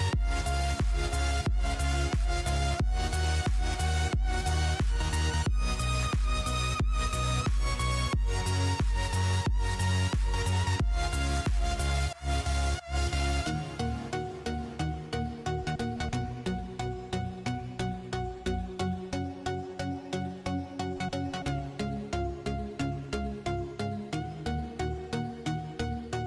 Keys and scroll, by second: 0.0-1.4 typing, 3.4-4.3 typing, 8.7-11.0 typing, 12.5-13.4 typing, 14.7-15.6 typing, 21.4-25.5 typing, 24.4 Tab, 26.0 Tab.